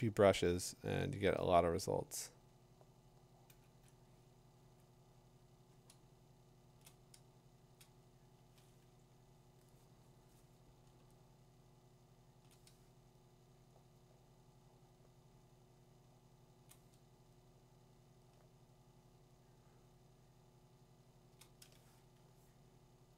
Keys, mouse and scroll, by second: 1.8-3.2 drag, 6.8 click, 7.6 click, 12.4 click, 12.5 click, 15.4 click, 15.8 click, 16.1-16.5 click, 16.6 click, 19.3 click, 19.4 click, 19.6 click, 19.7 click, 21.0-21.4 click, 21.1 click.